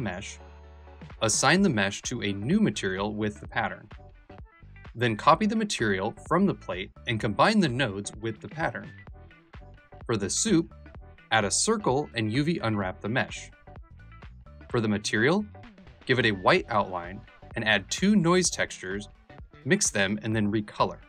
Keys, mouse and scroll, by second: 13.1 click, 14.2 click, 14.8-15.9 drag, 16.2 middle click, 16.5 click, 17.4 shift+a, 18.6 middle click, 20.1 middle click.